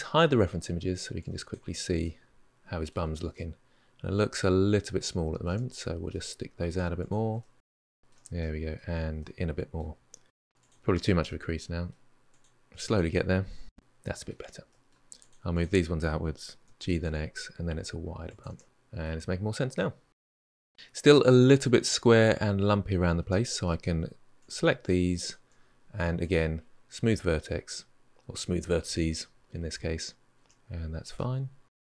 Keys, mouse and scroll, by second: 1.0-1.8 drag, 1.8-2.8 middle drag, 2.8 Tab, 3.1-5.3 middle drag, 5.3 Tab, 5.5 middle click, 5.9 shift+click, 6.0 shift+click, 6.1 middle click, 6.7 g, 7.3 middle click, 7.5 Tab, 7.6-8.0 middle drag, 8.0 Tab, 8.0 middle click, 8.7 g, 9.3 g, 9.8 middle click, 10.4 shift+drag, 10.5 shift+click, 10.6 middle drag, 10.9 drag, 11.0 shift+drag, 11.6 KP_1, 12.3 middle click, 12.9 g, 13.3 Tab, 13.4-14.2 middle drag, 14.2 Tab, 14.5 middle click, 15.0 click, 15.3 shift+click, 16.4 g, 18.3 Tab, 18.6 scroll up 1, 18.6-19.2 middle drag, 19.2 scroll down 1, 19.5-22.7 middle drag, 22.7-23.0 scroll up 3, 23.0 Tab, 23.4-24.2 middle drag, 24.2 click, 24.6 shift+click, 25.0 shift+click, 26.0-28.3 drag, 28.3-29.3 middle drag, 29.9 Tab, 30.0-30.4 middle drag, 30.4 scroll down 3, 30.6-31.4 middle drag, 31.4 Tab, 31.5 scroll up 3, 31.7 middle click.